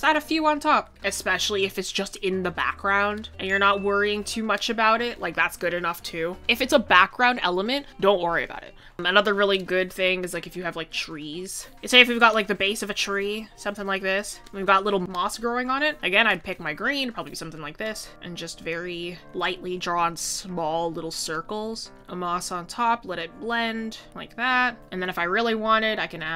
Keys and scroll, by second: 11.7 ctrl+z.